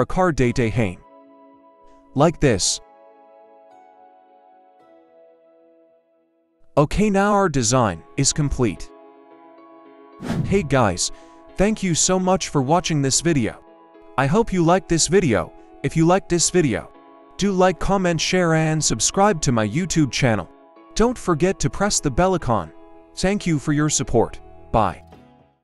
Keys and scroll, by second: 0.0 Return, 1.9 Right, 2.0 Right, 2.2 Right, 2.3 Right, 2.4 Right, 5.2 Down, 5.3 Down.